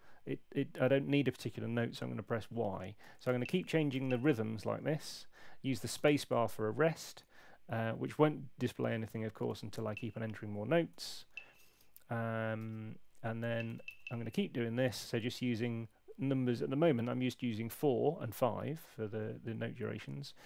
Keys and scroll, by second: 2.7-4.4 typing, 5.9 space, 9.5 4, 9.7 y, 10.9 5, 11.2 y, 12.6 space, 13.4 y.